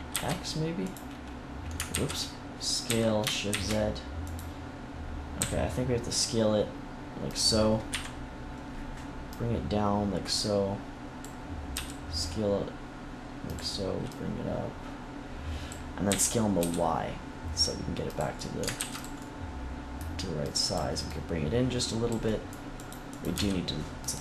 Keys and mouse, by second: 0.0 shift+x, 0.7-1.8 drag, 1.8 ctrl+z, 2.8 s, 4.2-5.3 drag, 5.3 s, 7.8 KP_3, 11.6 s, 14.0 click, 14.7-16.0 drag, 16.0 s, 18.1-19.6 drag, 18.7 ctrl+s, 22.2 click, 23.2 x.